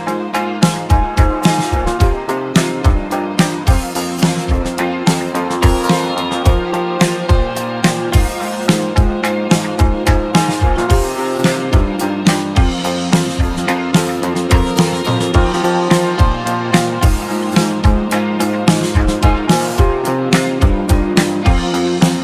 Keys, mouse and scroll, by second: 5.0 scroll up 1, 5.1-7.6 middle drag, 13.5-16.0 shift+middle drag, 16.0 shift+a.